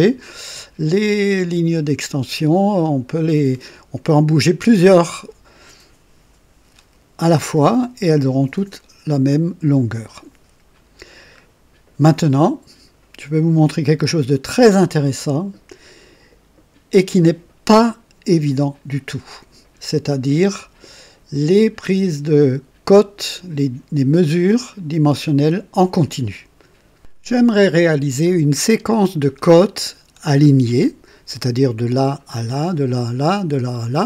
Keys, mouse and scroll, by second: 11.0 scroll down 2, 12.3-13.0 right drag, 13.5-19.1 drag, 26.9 click.